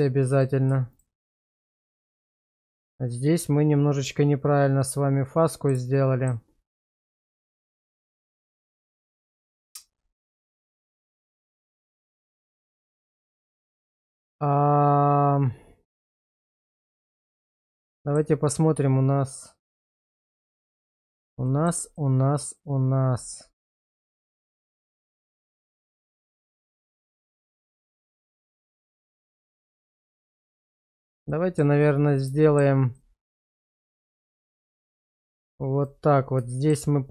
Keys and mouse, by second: 0.3 click, 0.9 shift+click, 2.7-5.7 middle drag, 5.9 shift+middle click, 7.0-16.8 middle drag, 18.0 shift+middle click, 19.5 middle click, 20.4 shift+middle click, 21.5 shift+middle click, 22.0-25.6 middle drag, 28.4-30.7 middle drag, 31.3 shift+middle click, 32.4 shift+middle click, 32.9 middle click, 35.1 shift+click, 36.5 shift+middle click.